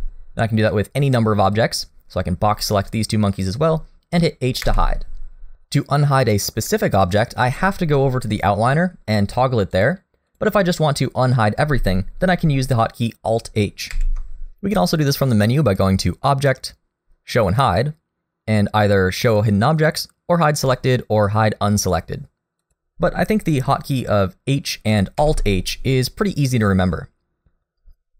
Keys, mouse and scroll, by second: 0.7 middle click, 1.5 click, 4.7 h, 9.7 click, 10.3 click, 14.0 alt+h, 15.7 click, 25.2 alt+h.